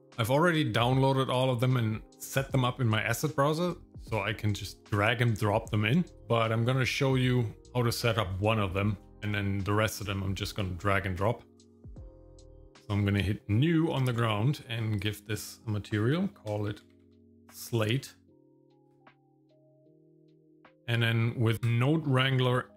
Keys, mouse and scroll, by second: 12.1 click, 15.0-18.9 drag, 20.0-20.6 scroll down 4, 20.6 middle click, 21.5 middle click, 22.0 n, 22.5 middle click.